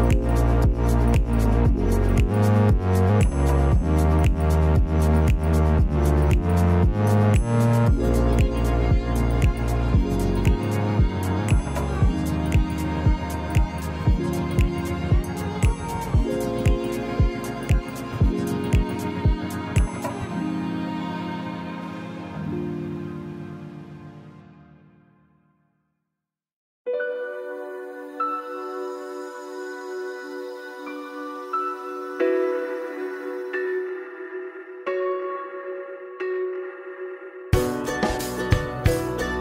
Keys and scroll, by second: 33.7 ctrl+z.